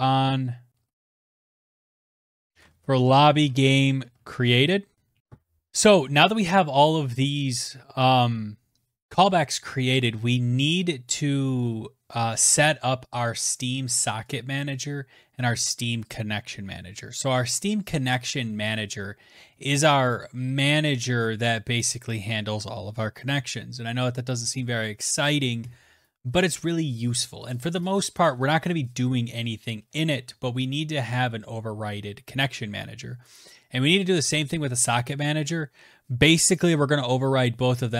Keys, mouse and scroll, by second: 0.0-5.1 typing, 12.9-13.5 scroll, 13.5-15.6 scroll, 16.9 click, 18.5 scroll, 19.1 scroll, 26.4 right click, 26.5-27.0 scroll, 27.0 click, 32.2 click, 33.5-37.2 scroll.